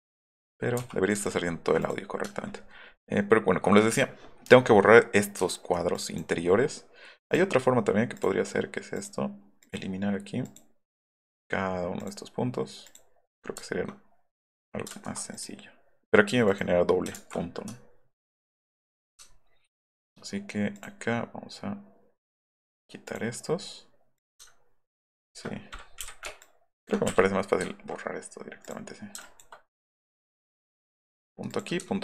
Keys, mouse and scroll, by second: 0.4 click, 1.0 middle click, 1.8 click, 5.9 click, 7.3 click, 8.2 click, 9.0 click, 9.6 click, 10.4 click, 11.1 click, 12.0 click, 14.4 click, 14.9 ctrl+z, 15.3 click, 16.5 click, 17.2 ctrl+z, 17.7 alt+right click, 19.3 alt+middle click, 19.6 alt+middle click, 20.7 click, 22.3 click, 23.1 click, 24.1 click, 24.9 ctrl+click, 26.1 scroll up 2, 26.4 ctrl+click, 27.0 Delete, 27.7 alt+click, 28.6 click, 29.2 ctrl+click, 30.0 click, 31.5 click, 31.9 alt+middle click.